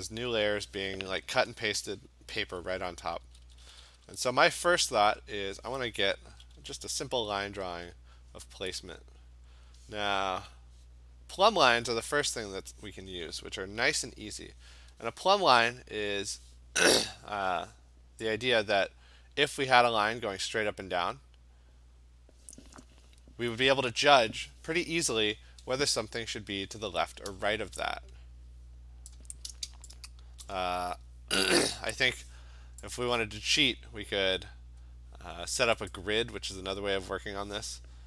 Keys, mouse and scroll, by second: 3.0-4.6 typing, 5.5 click, 6.3 [, 6.6 [, 7.8 [, 9.7 click, 10.5 click, 11.7 click, 12.0 click, 12.6 click, 13.1 click, 13.8 d, 29.1-30.4 click, 30.2 click, 30.3 click, 30.5 click, 30.9-31.4 scroll, 33.0 click, 36.0 click.